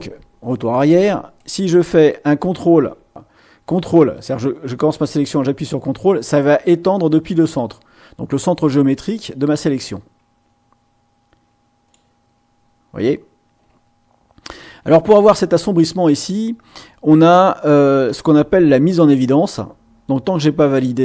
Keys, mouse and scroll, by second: 1.3-5.9 drag, 12.0 ctrl+middle click, 18.9-21.0 drag.